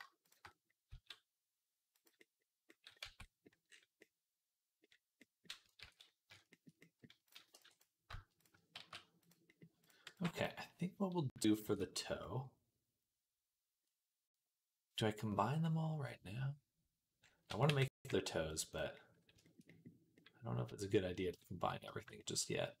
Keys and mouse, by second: 0.0 shift+click, 0.7 s, 2.9 Tab, 3.8-8.2 middle drag, 5.7 ctrl+s, 7.1 click, 7.1 right click, 7.4 b, 8.2 click, 8.3-9.7 shift+middle drag, 8.6 shift+s, 9.7 click, 9.9-22.8 middle drag, 9.9 b, 11.5 ctrl+s, 17.5 g.